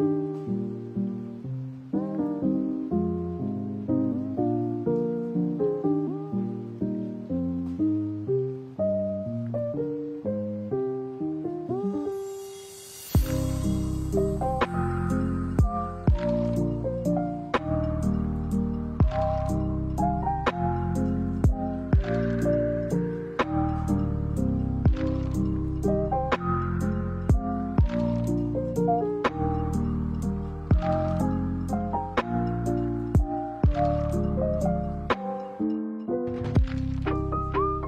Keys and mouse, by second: 0.0 ctrl+r, 0.9 ctrl+r, 1.5 ctrl+r, 2.2 ctrl+r, 4.1 alt+right click, 4.7 alt+shift+right click, 5.4 alt+shift+right click, 5.9 alt+shift+right click, 6.3 alt+shift+right click, 6.9 alt+shift+right click, 7.5 alt+shift+right click, 7.9 alt+shift+right click, 8.3 middle click, 9.0 s, 9.9 middle click, 12.3 right click, 12.9 middle click, 14.2 middle click, 15.2 alt+right click, 15.8 shift+s, 17.7 right click, 18.4 middle click, 19.1 shift+right click, 19.7 shift+right click, 20.0 middle click, 20.7 shift+right click, 21.3 shift+right click, 21.6 middle click, 22.3 shift+right click, 22.6 middle click, 23.2 shift+right click, 23.4 middle click, 24.0 shift+right click, 24.3-26.2 middle drag, 27.6-28.6 drag, 31.5-33.9 middle drag, 34.0 middle click, 34.8 middle click, 35.9-36.4 drag, 36.6-37.8 middle drag.